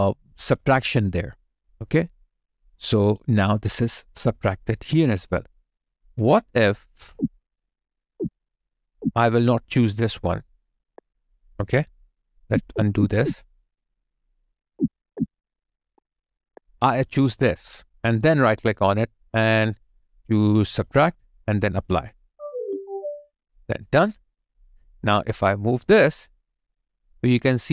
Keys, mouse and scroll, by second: 1.7 alt+click, 5.2 alt+right click, 7.0 ctrl+z, 12.3 ctrl+z, 14.2 ctrl+z, 17.0 ctrl+z, 17.2 alt+click, 18.1 right click, 27.6 alt+click.